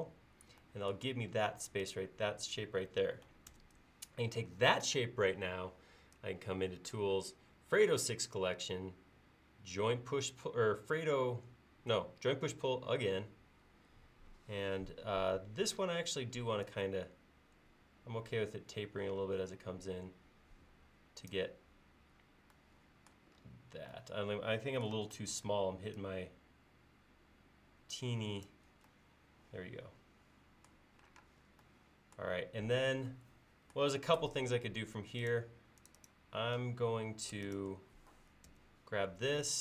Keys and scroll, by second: 3.5 ctrl+s, 25.4 super+z, 31.2 space, 38.5 ctrl+s.